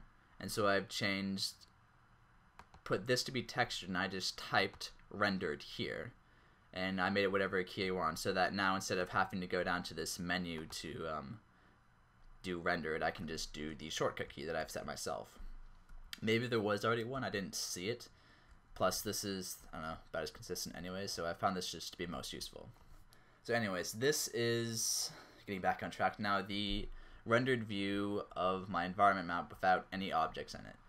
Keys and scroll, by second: 16.0 alt+shift+z, 17.2 alt+shift+z, 19.1-20.8 typing, 22.2 typing, 27.1-30.8 typing.